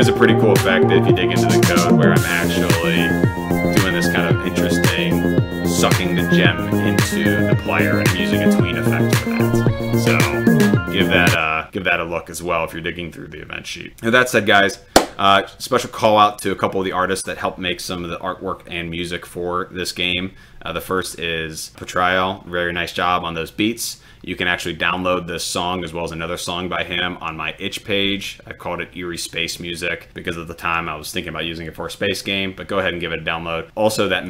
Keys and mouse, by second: 2.7 click, 11.0 click, 20.9 click, 28.1 click.